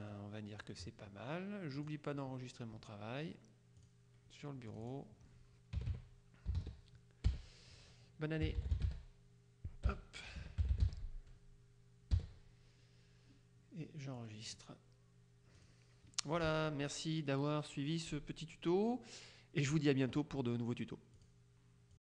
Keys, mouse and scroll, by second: 0.2-1.2 drag, 1.8 click, 3.9 click, 4.8 click, 5.9 KP_1, 6.0 KP_4, 6.7 c, 8.4-12.3 typing, 14.3 click, 15.7 click, 21.3 click, 22.1 click.